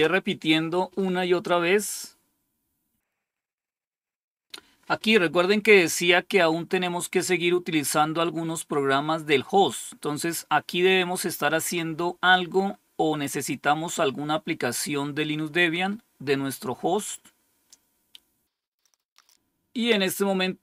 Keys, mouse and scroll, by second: 18.6 scroll down 1.